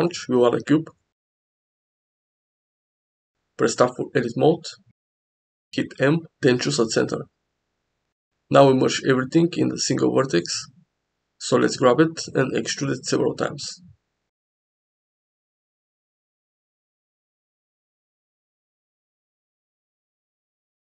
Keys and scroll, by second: 0.9 shift+a, 3.2 Tab, 5.3 m, 11.1 1, 12.0 g, 13.5 e, 14.9 e, 16.0 e, 19.3 e.